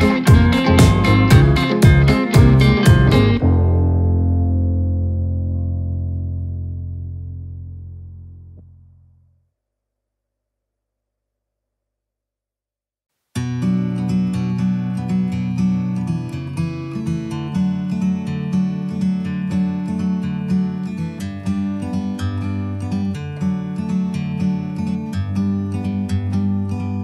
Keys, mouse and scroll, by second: 0.5 scroll up 1, 0.7-1.4 shift+middle drag, 1.4-2.3 scroll up 3, 2.3 scroll down 1, 2.6-3.2 middle drag, 3.2 scroll up 2, 3.8-4.4 shift+middle drag, 4.4 click, 5.9 click, 6.7 click, 7.0 Tab, 7.9 click, 8.5 a, 10.4 ctrl+b, 13.2-13.6 scroll down 5, 13.6 Tab, 14.1 click, 14.9 Tab, 15.2 Tab, 16.1 click, 19.7 click, 20.1 ctrl+a, 21.7-22.3 scroll up 8, 22.5 scroll down 1, 22.9-23.2 scroll up 1, 23.2 Tab, 24.0 click, 24.2 a, 25.7 ctrl+b.